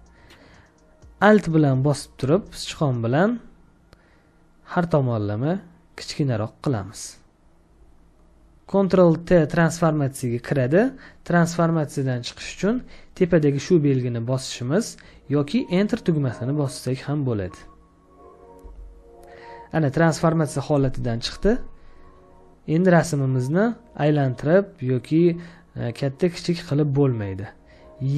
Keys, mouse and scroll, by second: 2.3 alt+click, 18.5 Return.